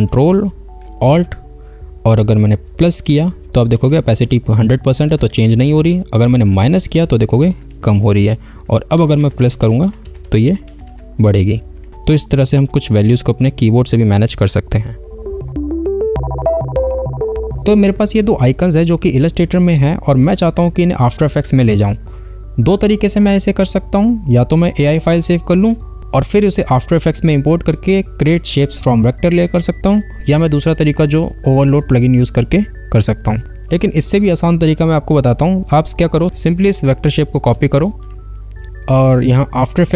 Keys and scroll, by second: 38.1 ctrl+c.